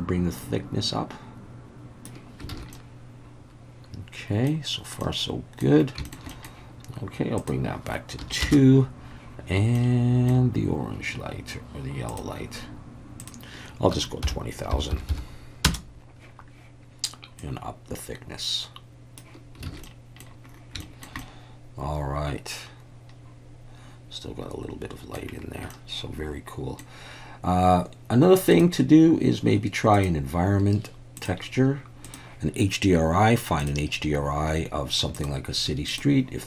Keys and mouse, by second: 2.5 alt+a, 2.7-4.5 middle drag, 5.0-5.6 middle drag, 6.1 shift+middle click, 6.3 middle drag, 7.4-9.0 drag, 9.8-10.3 middle drag, 12.1 click, 13.3-16.2 drag, 14.9 0, 17.4-19.2 drag, 19.7 alt+a, 19.8-20.2 middle drag, 20.8 shift+middle drag, 21.2-25.2 middle drag, 25.7-26.8 middle drag, 28.5 click, 30.0-31.3 drag, 32.2-33.6 drag.